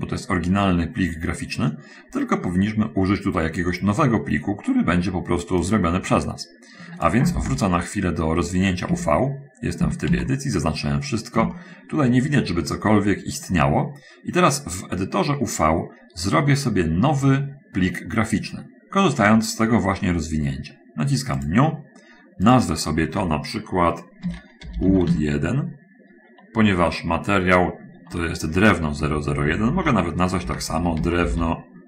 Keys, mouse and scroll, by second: 5.9-7.4 drag, 7.4 shift+space, 9.1 Tab, 10.2 a, 11.8 shift+middle click, 21.8 click, 22.8 click, 24.6-25.3 typing, 29.4 BackSpace, 29.8 BackSpace, 30.8-31.8 typing.